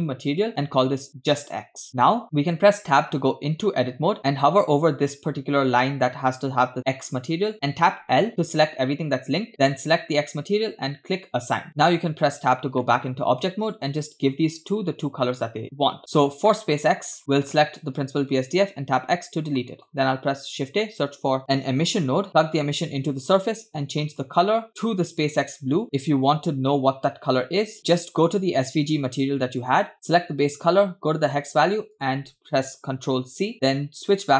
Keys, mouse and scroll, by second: 0.3-1.4 shift+drag, 2.0 shift+middle click, 2.8 Tab, 7.9 l, 9.7 click, 11.2 click, 11.7 Tab, 12.9-13.5 shift+middle drag, 15.3 click, 16.5 middle click, 16.9 scroll up 3, 17.2 click, 19.6 middle click, 19.6 x, 20.1 shift+a, 22.6-23.6 drag, 24.0 middle click, 24.3-24.6 scroll up 2, 27.8 click, 29.9-32.9 drag, 34.0 click.